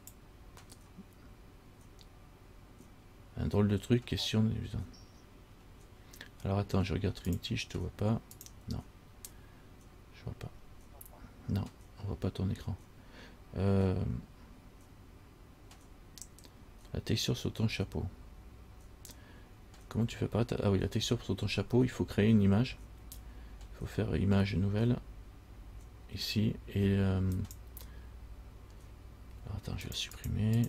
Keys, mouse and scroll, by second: 27.6 click.